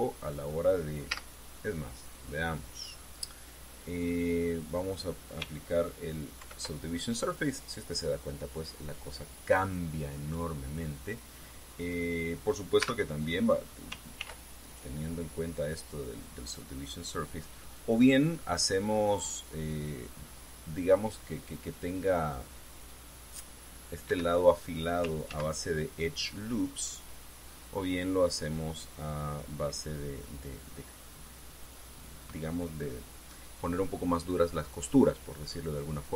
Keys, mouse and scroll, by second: 0.2 Tab, 1.9 z, 7.1 ctrl+2, 13.5 Tab, 14.9 ctrl+r, 15.4 ctrl+click, 24.8 Escape, 26.0 ctrl+z.